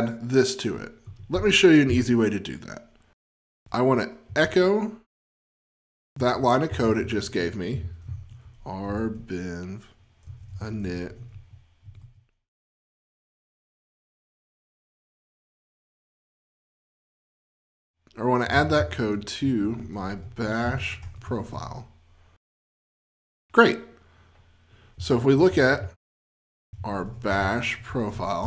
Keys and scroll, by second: 3.4 F20, 6.4 F20, 6.9 shift+F20, 10.4 F20, 15.1 shift+F20, 20.5 F20, 22.5 F20, 27.2 F20.